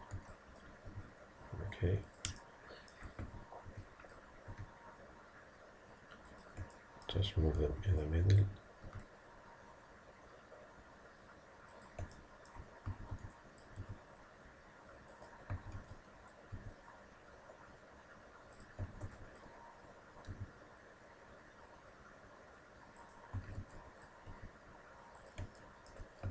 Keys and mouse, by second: 0.2 b, 0.9 g, 2.5-4.0 middle drag, 3.3 a, 4.0 b, 4.6 g, 6.7-8.1 drag, 7.6 a, 7.8 b, 8.9 g, 12.2 middle click, 12.9 a, 13.2 middle click, 13.2 b, 13.9 g, 15.6 a, 15.8 b, 16.6 g, 18.9 a, 19.1 b, 20.3 g, 23.4 a, 23.6 b, 24.3 g, 25.6-26.3 middle drag.